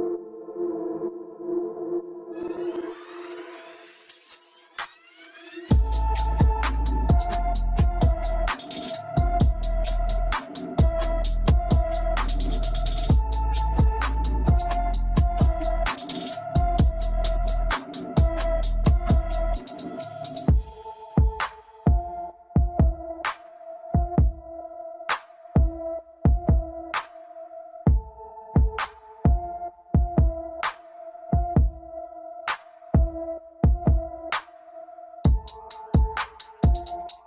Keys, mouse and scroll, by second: 1.4 shift+middle click, 2.4 scroll up 1, 2.6 middle click, 3.6 click, 9.3-11.8 drag, 13.4-14.4 drag, 14.4 scroll down 2, 14.5-15.9 middle drag, 16.3-16.9 drag, 17.3-18.5 middle drag, 18.7-20.2 middle drag, 20.2-20.7 scroll up 2, 20.7-23.3 shift+middle drag, 23.3 click, 25.2-26.8 drag, 28.8 click, 29.7 middle click, 30.0-30.6 scroll up 1, 30.6-32.5 drag, 32.9 click, 35.9 drag.